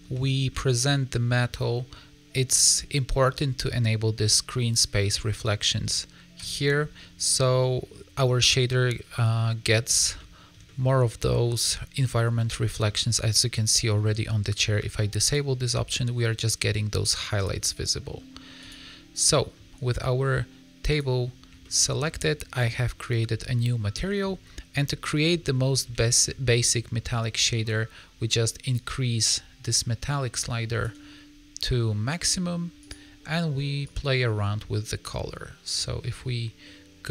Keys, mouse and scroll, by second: 0.2 shift+middle click, 0.5 scroll up 3, 0.7 middle click, 2.5 click, 6.3 click, 7.2 middle click, 9.0 scroll down 2, 9.3 middle click, 10.1 shift+middle click, 10.6 middle click, 11.9 middle click, 15.2 click, 18.6 click, 19.2 middle click, 20.8 click, 21.5 shift+middle click, 23.2-23.5 scroll down 5, 23.9 middle click, 24.1-24.9 scroll up 3, 24.9 middle click, 25.9 shift+middle click, 26.4 scroll up 2, 26.7 middle click, 28.7 click, 32.7 click.